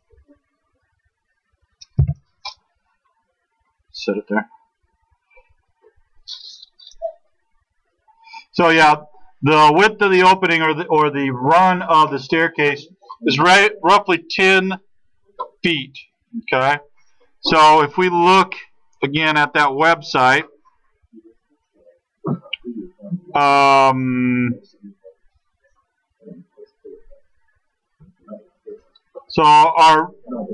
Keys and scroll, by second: 2.0 t.